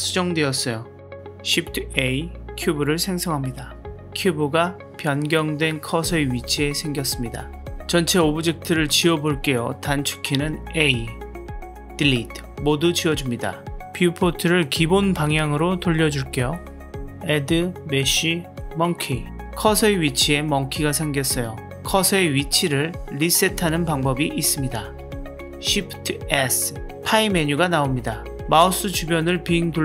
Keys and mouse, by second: 1.3 shift+a, 3.4 s, 4.3-7.7 middle drag, 7.7 x, 7.8-9.0 middle drag, 10.5 a, 11.9 Delete, 14.9-16.6 drag, 17.3-19.5 drag, 25.2 shift+s.